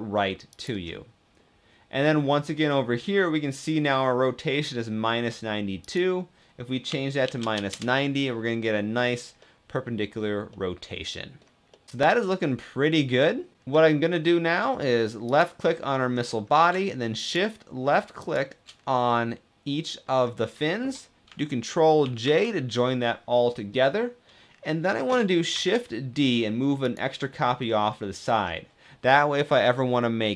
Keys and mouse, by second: 0.3 click, 5.7-7.9 drag, 8.9 middle click, 9.1 click, 9.3 middle click, 10.2 click, 11.4-13.2 drag, 11.9 ctrl+s, 16.0 middle click, 16.9 shift+middle click, 19.1 click, 21.8 ctrl+j, 23.1-23.4 drag, 25.3 shift+d, 26.6 click, 27.6-28.1 middle drag.